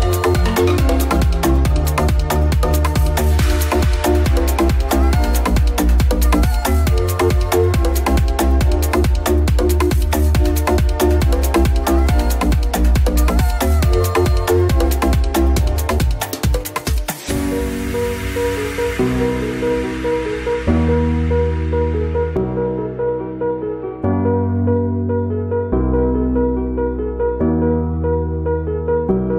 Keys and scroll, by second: 0.0 space, 3.3 space, 8.2 ctrl+Return, 11.7 ctrl+j, 14.6 ctrl+s.